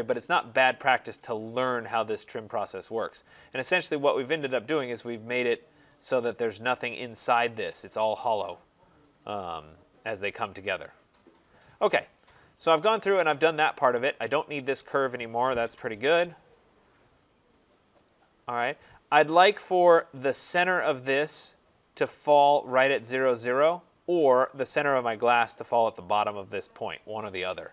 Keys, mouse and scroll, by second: 0.2 right click, 0.5-1.0 scroll, 4.8 middle click, 5.0 middle click, 5.3 middle click, 5.3 right click, 5.6 middle click, 5.7 middle click, 5.7 middle click, 5.8 middle click, 6.5 click, 7.5 click, 8.5 middle click, 8.5 middle click, 8.6 middle click, 8.8 scroll, 11.0 right click, 11.2 scroll, 11.9 click, 12.3-13.0 scroll, 13.8 scroll, 14.8 click, 15.5 Delete, 16.2-16.8 scroll, 17.2-17.7 scroll, 18.5 right click, 18.9-19.3 scroll, 19.9-22.2 scroll.